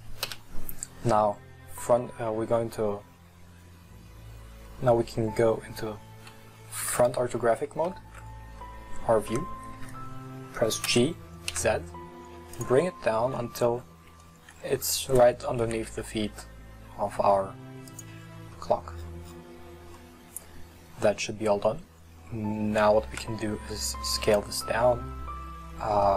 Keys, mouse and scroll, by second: 0.2 KP_1, 1.8-3.1 scroll up 3, 3.1-4.5 scroll up 2, 8.7-10.9 shift+middle drag, 10.9 g, 12.8 scroll up 7, 13.4-14.6 shift+middle drag, 14.6-15.2 scroll up 7, 15.7 g, 18.2-20.0 scroll down 20, 18.5 middle drag, 20.0-22.3 middle drag, 22.3 scroll up 1, 22.5-23.1 scroll down 5, 23.1 s, 24.6-26.1 middle drag.